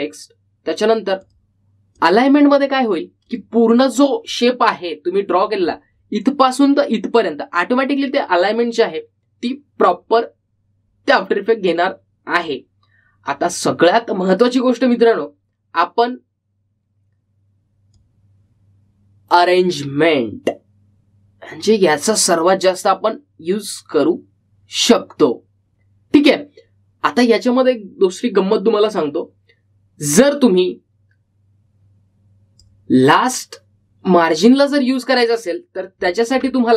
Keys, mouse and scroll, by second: 2.4 click, 13.5 click, 19.1-29.1 drag, 31.4-36.7 drag.